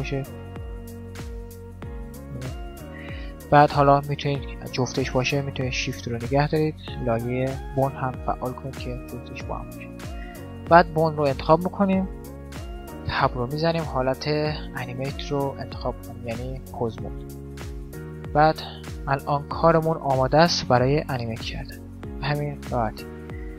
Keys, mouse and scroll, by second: 0.6-4.7 drag, 8.2-9.9 drag, 9.9 middle click, 10.7-12.4 right drag, 13.5 Tab, 18.3 right click, 19.7 click, 20.0 middle click, 20.7 click, 20.7 right click, 21.8 click, 22.4 right click, 22.7 click.